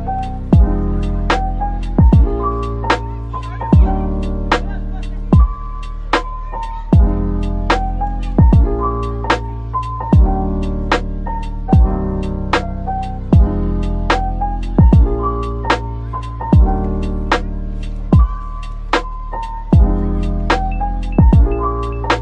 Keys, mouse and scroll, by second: 1.1-1.9 typing, 2.7 right click, 3.0 middle click, 3.9-6.7 typing, 5.3-5.6 scroll down 1, 8.3 middle click, 9.3 typing, 10.9 middle click, 13.0 Tab, 13.6 Tab, 17.1 typing, 19.0 double click, 19.2 middle click, 20.7 Tab, 21.2 middle click.